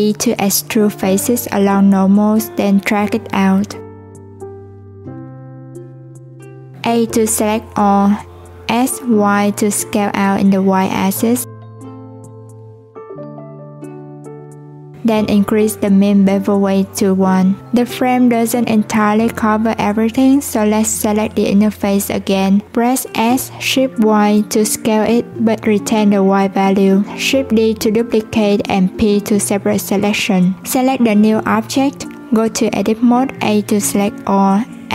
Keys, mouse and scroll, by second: 0.4 alt+e, 15.7-18.8 drag, 30.1 Tab, 30.5 click, 33.6 a.